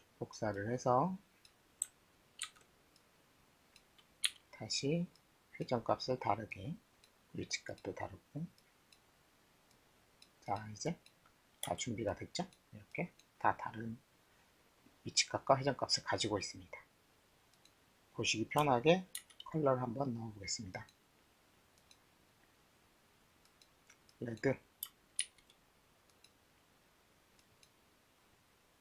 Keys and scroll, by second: 2.4 ctrl+d, 4.2 e, 11.6 w, 19.1 shift+t, 25.2 shift+t.